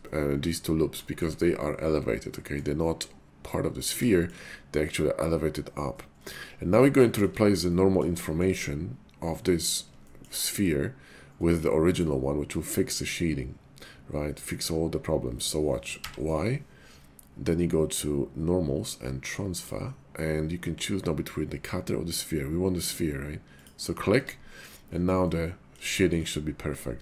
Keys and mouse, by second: 0.0 middle click, 1.0 shift+middle click, 1.4-2.6 middle drag, 4.1 shift+middle click, 7.1 shift+middle click, 7.7 middle click, 8.2 shift+middle click, 10.0 shift+middle click, 12.0 middle click, 15.9 y, 23.6 click, 24.1 Tab, 25.3-25.7 middle drag, 25.9 shift+middle drag.